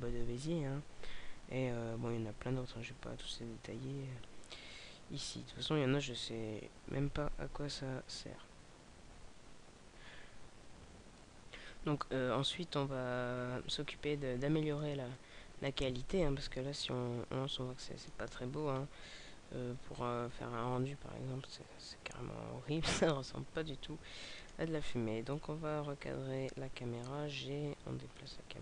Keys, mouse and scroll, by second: 11.1 middle click, 13.0 shift+a, 14.1 middle click, 16.8 alt+a, 17.3 middle click, 18.4 alt+a, 19.3 KP_0, 22.8 Escape, 24.3 right click, 28.2 click.